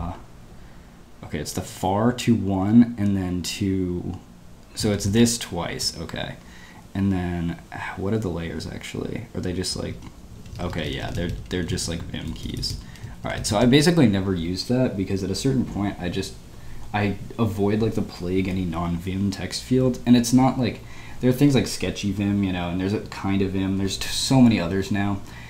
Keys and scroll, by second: 10.0 Down, 10.4 Down, 10.5 Down, 10.6 Down, 10.9 Up, 11.0 Up, 11.1 Up, 11.2 Up, 11.5 Right, 11.7 Right, 11.8 Right, 11.9 Right, 12.2 Left, 12.4 Left, 12.5 Left, 12.8 Right, 13.3 Right.